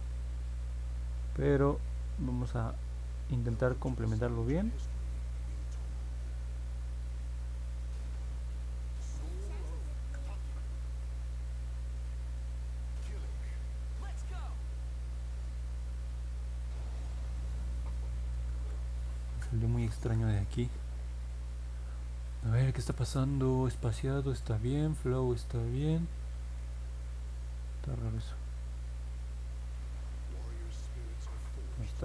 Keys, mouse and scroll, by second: 7.8 click, 9.9 ctrl+z, 12.5 click, 15.3 click, 16.2 click, 18.4 ctrl+z, 19.1 ctrl+z, 19.8 ctrl+z.